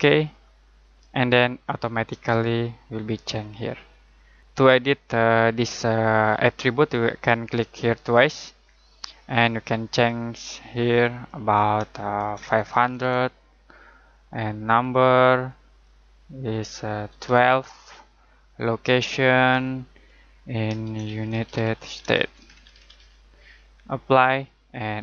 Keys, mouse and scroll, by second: 1.1 middle click, 1.5-3.1 scroll up 1, 3.9 middle click, 7.9 click, 11.9-13.5 typing, 14.6 click, 16.8-17.7 typing, 18.4 click, 20.6-23.4 typing, 24.2 click.